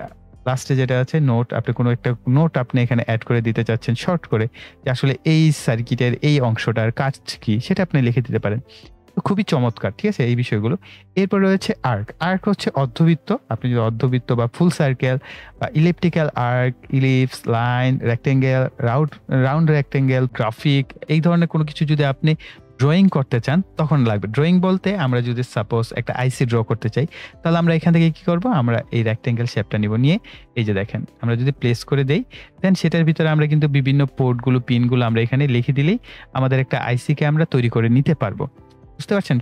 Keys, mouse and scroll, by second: 4.6 right click, 5.7 click, 10.3-13.9 drag, 22.8 click, 27.7-29.2 drag, 32.0 click, 34.2 right click, 34.9 click, 39.1 scroll up 1.